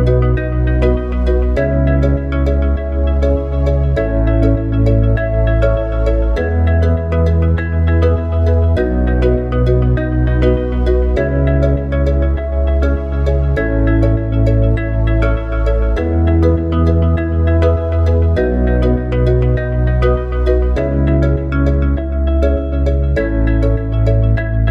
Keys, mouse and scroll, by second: 13.7 click, 15.9 click, 20.3-24.7 drag.